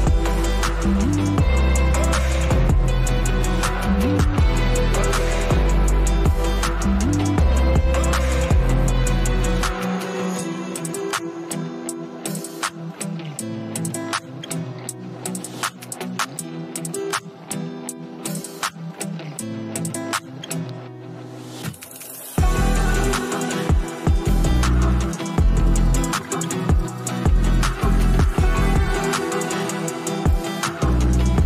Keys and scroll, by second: 16.9 space, 20.7-21.4 typing.